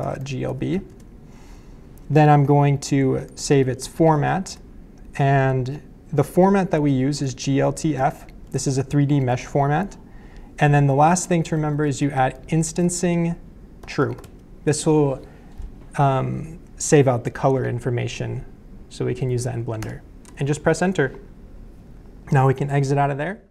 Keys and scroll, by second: 0.0-0.9 typing, 3.0-4.6 typing, 7.0-8.9 typing, 11.3-14.7 typing, 19.8 Return.